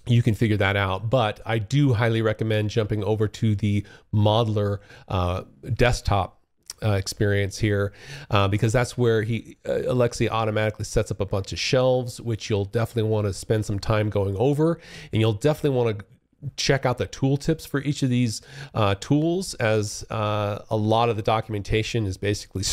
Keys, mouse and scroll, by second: 1.0 click, 3.3 click, 10.6 click, 11.4 click, 12.2 click.